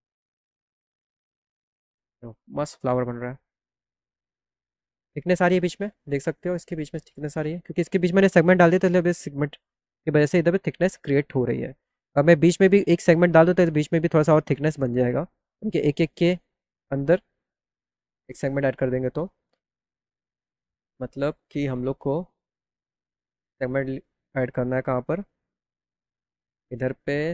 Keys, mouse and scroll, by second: 0.4 click, 1.3 click, 1.9 click, 5.1 click, 19.0 click, 21.6 click, 23.1 click, 26.2 click, 27.2 ctrl+click.